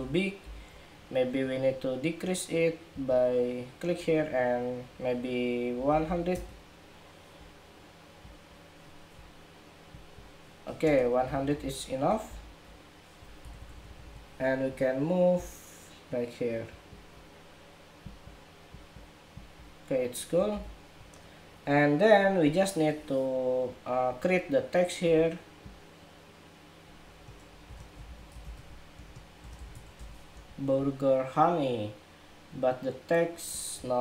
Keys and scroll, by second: 0.2 super+-, 12.0 super+=, 20.2 super+=, 30.0 Escape.